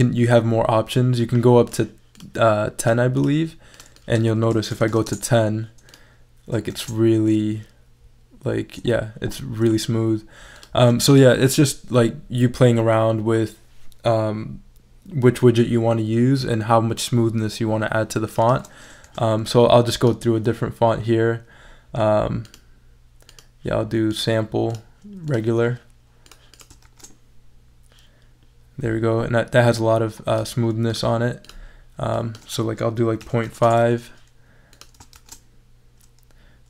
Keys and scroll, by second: 4.5-5.4 typing, 6.7 shift+super+e, 19.0 super+a, 26.8 shift+super+e, 33.0-33.9 typing, 35.1 shift+super+e.